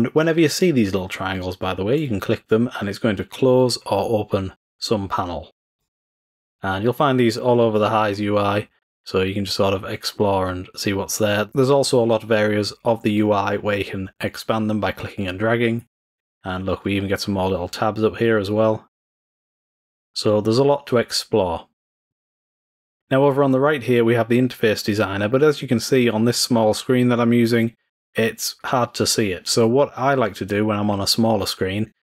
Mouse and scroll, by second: 1.9 click, 2.7 click, 3.5 click, 4.2 click, 5.7 click, 6.0 click, 7.4 click, 7.7 drag, 9.9 click, 11.1 click, 13.1-15.9 drag, 16.7 click, 17.4 click, 18.2 click, 18.4 click, 20.0 click, 21.1 click, 22.0 click, 22.2 click.